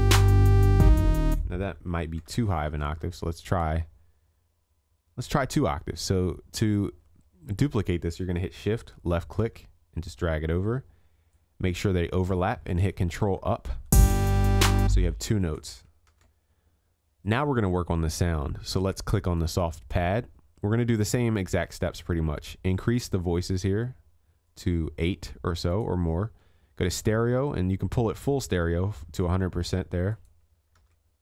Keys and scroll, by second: 2.1 ctrl+a, 2.9 ctrl+l, 13.1 ctrl+Up, 16.1 ctrl+s, 30.9 ctrl+s.